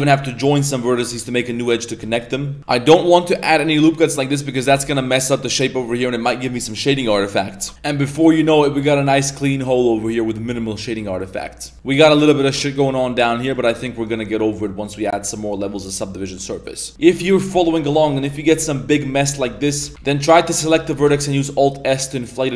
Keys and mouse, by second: 1.0 j, 2.0 middle click, 2.6 ctrl+r, 4.5 middle click, 4.7 Tab, 4.9 middle click, 5.3 middle click, 5.8-6.2 middle drag, 6.6 middle drag, 7.0 middle drag, 7.5 Tab, 7.7 Tab, 7.7-11.1 middle drag, 11.4 middle click, 11.7 Tab, 12.1 middle click, 12.6-13.3 middle drag, 13.9 right click, 14.8 click, 15.7 click, 16.2-16.9 middle drag, 16.9 alt+s, 16.9 Tab, 17.0 middle click, 17.6 middle click, 18.0 middle click, 18.5 Tab, 18.9 middle click, 19.8 z, 19.9 z, 20.0 right click, 20.5 middle click, 21.0 alt+s.